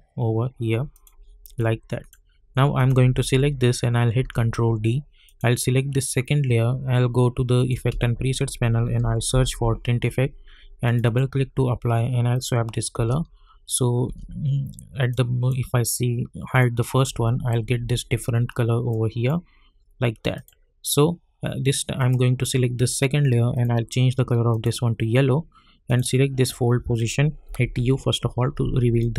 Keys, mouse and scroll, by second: 4.1 ctrl+d, 5.2 click, 6.9 -, 7.5 click, 7.9 ctrl+a, 8.6-9.9 typing, 10.8 click, 12.9 space, 15.1-16.5 drag, 17.0 space, 18.9-20.3 drag, 27.4 u.